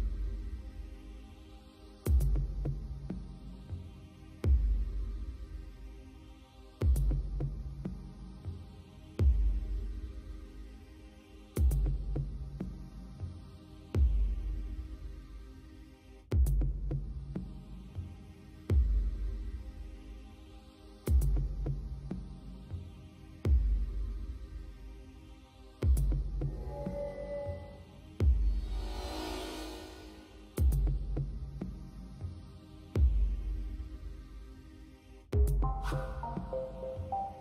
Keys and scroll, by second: 0.4 space, 3.2 space, 5.3 space, 11.7 space, 13.5 space, 15.0 space.